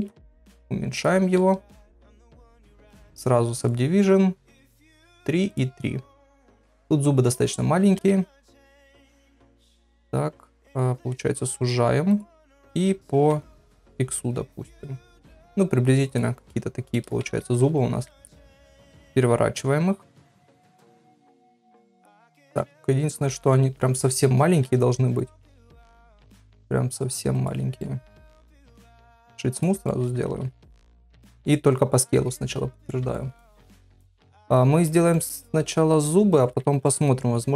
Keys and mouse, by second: 0.3 s, 1.4 g, 2.0 ctrl+a, 2.9 click, 4.5 click, 5.1 click, 6.3 shift+middle click, 7.9 Tab, 8.5 middle click, 9.4 3, 9.7 click, 12.4 middle click, 12.4 s, 13.1 s, 16.5 middle click, 17.2 Tab, 18.0 KP_3, 19.1 r, 21.7 middle click, 22.7 s, 24.6 g, 25.8 KP_1, 26.4 g, 27.8 middle click, 29.1 right click, 29.8 shift+middle click, 30.3 ctrl+a, 32.1 KP_1, 33.1 shift+middle click, 33.9 s, 35.1 middle click.